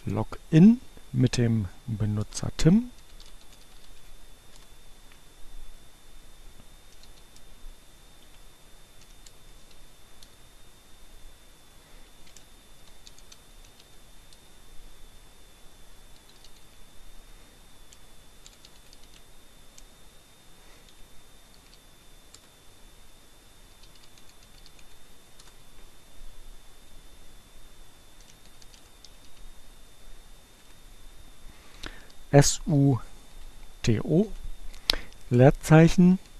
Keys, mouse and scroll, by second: 1.9 Return, 2.3-3.4 typing, 4.2 Return, 6.8 l, 7.1 space, 7.7 -, 8.0 l, 9.3 space, 9.6 shift+7, 12.7-14.1 typing, 16.2-17.1 typing, 18.8 r, 21.2 w, 24.3 i, 28.9 t, 32.2 u.